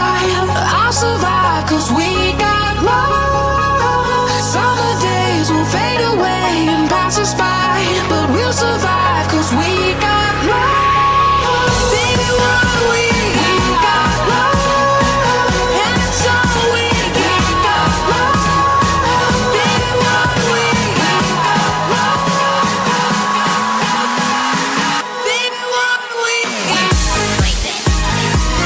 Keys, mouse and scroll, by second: 0.3 alt+h, 0.3 ctrl+Tab, 0.3 right click, 0.7 click, 0.8 middle click, 0.9 right click, 0.9 KP_5, 1.1 click, 1.2 ctrl+z, 1.6 click, 1.6 g, 1.9 middle click, 2.0 ctrl+b, 2.4 Tab, 2.4 ctrl+s, 2.5 middle click, 3.1 ctrl+s, 3.5 ctrl+s, 4.5 middle click, 4.8 ctrl+Tab, 5.2 right click, 6.1 middle click, 6.3 right click, 7.1 ctrl+e, 7.1 middle click, 7.6 ctrl+s, 7.6 Tab, 7.7-10.9 typing, 8.1 ctrl+z, 8.5 right click, 8.7 middle click, 8.9 click, 8.9-10.0 right drag, 9.2-10.3 drag, 10.3 right click, 10.5 click, 10.9 right click, 11.3 click, 11.6 middle click, 11.9 click, 11.9 right click, 12.0 ctrl+j, 12.4 ctrl+j, 12.7 click, 12.7 right click, 12.9-14.7 typing, 13.2 click, 13.3 ctrl+j, 13.5 click, 13.7 right click, 14.0 click, 14.3 right click, 14.8 middle click, 14.9 click, 15.1 middle click, 15.3 click, 15.5 ctrl+a, 16.4 click, 16.5 right click, 16.7 click, 16.8 ctrl+z, 17.2 click, 17.3 KP_7, 17.7 click, 18.0 middle click, 18.5 ctrl+z, 18.7 ctrl+z, 18.7 middle click, 19.1 click, 19.3 middle click, 19.5 s, 19.7 KP_7, 19.9 alt+h, 20.4 right click, 20.4 KP_7, 20.5 s, 20.9 click, 20.9 right click, 21.2 ctrl+s, 21.5 right click, 21.6 Tab, 21.7 middle click, 21.9 a, 22.0 alt+e, 22.8 Tab, 22.8 click, 22.9 middle click, 23.1 Tab, 23.1 ctrl+i, 23.1-26.9 typing, 23.5 middle click, 23.9 middle click, 24.0 click, 24.3 middle click, 24.7 middle click, 25.2 middle click, 25.3 right click, 26.0 middle click, 26.1 ctrl+z, 26.7 click, 27.7 middle click, 27.9 ctrl+z, 28.1-28.6 typing.